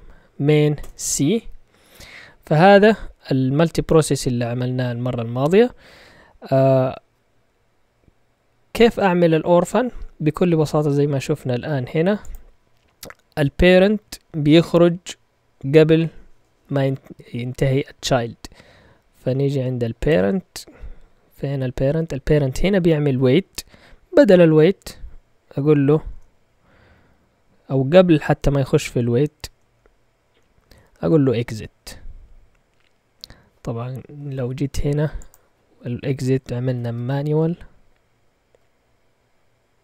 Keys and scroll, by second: 0.8 Return, 2.2 Down, 2.8-4.2 typing, 3.7 Down, 21.5 Up, 36.3-37.2 typing.